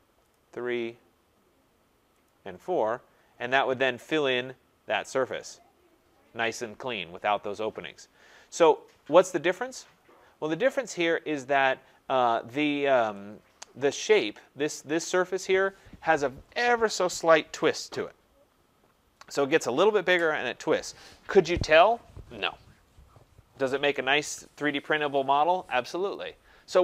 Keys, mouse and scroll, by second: 0.3 click, 0.6 scroll, 2.1 click, 2.8-3.9 scroll, 4.0 scroll, 5.2 click, 7.8 scroll, 8.8-9.2 scroll, 11.6 click, 14.2 click.